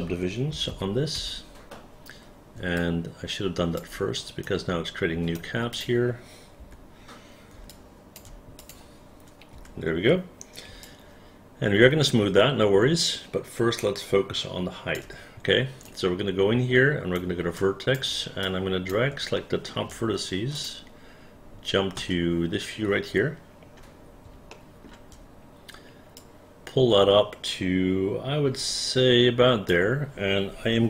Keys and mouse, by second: 0.7 KP_1, 0.8 KP_6, 1.3 Return, 2.9 alt+click, 4.5 alt+right click, 5.9 click, 6.7 Delete, 7.8 alt+click, 8.7 alt+click, 9.7 Delete, 10.9-15.1 alt+drag, 15.9-17.3 alt+right drag, 17.7 alt+click, 18.5 alt+click, 19.5 alt+middle click, 20.7 alt+click, 22.1 space, 24.6 alt+middle click.